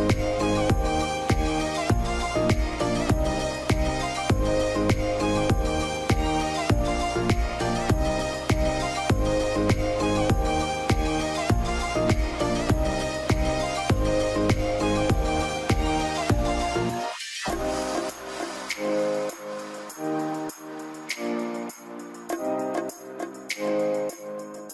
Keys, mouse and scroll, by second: 0.3 middle click, 1.2 scroll down 2, 1.7 middle click, 1.9 scroll down 1, 2.0 scroll up 1, 2.8 middle click, 3.1 scroll up 1, 3.3-4.2 scroll down 2, 3.5 alt+middle click, 4.2 scroll up 1, 4.6 middle click, 5.2-6.5 scroll up 1, 12.8 scroll down 1, 14.6-15.0 scroll up 1, 15.5 middle click, 16.0 scroll up 1, 18.5-19.1 scroll up 1, 19.3 z, 20.2 g, 20.4-21.3 scroll up 1, 21.6 middle click, 21.9 scroll up 1, 24.4 scroll down 1.